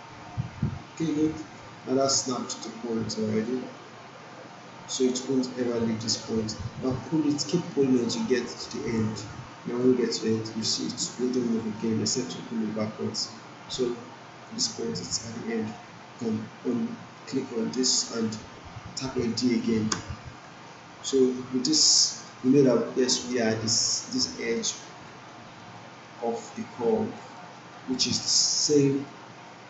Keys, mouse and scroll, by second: 1.8 alt+right click, 3.8-5.6 drag, 17.2 click, 19.9 d, 21.3 alt+middle click, 21.7-22.4 alt+right drag, 24.5 alt+middle click, 25.1 alt+right click, 25.5 alt+middle click, 26.8-28.5 alt+right click, 27.4 alt+middle click, 27.7 alt+right click, 28.2 alt+middle click, 28.6-29.2 alt+right drag.